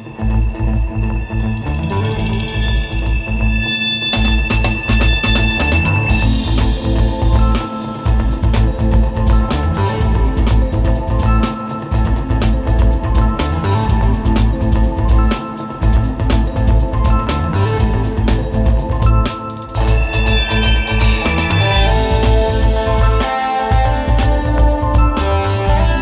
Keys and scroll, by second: 2.1-4.3 typing, 5.8 space, 7.1 space, 7.4 space, 9.1 space, 9.7 super+s, 9.9 super+Tab, 10.4-11.9 typing, 12.7 super+space, 17.2 space, 17.7 space, 20.7 super+z, 21.2 space, 21.6 space, 21.8 space, 22.3 alt+super+space, 22.8 space, 25.5 space.